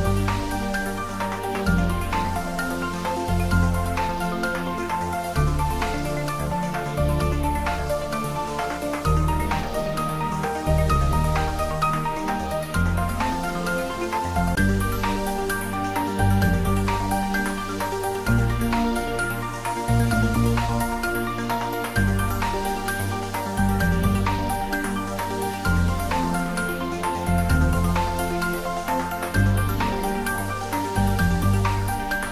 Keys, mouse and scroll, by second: 0.9 click, 3.1-3.5 scroll down 1, 3.8-5.7 middle drag, 5.7-6.0 scroll up 1, 7.5 alt+shift+click, 8.8-9.5 shift+scroll down 1, 10.6 shift+click, 11.4 shift+click, 12.9 shift+click, 13.6 shift+click, 13.7-17.7 middle drag, 17.7 scroll down 1, 18.0-19.2 scroll up 1, 19.3-19.6 scroll down 1, 20.9-23.4 drag, 23.4-27.1 middle drag, 27.1 scroll down 1, 28.1-29.6 scroll down 1, 29.6-31.5 scroll up 1, 31.6-32.3 drag.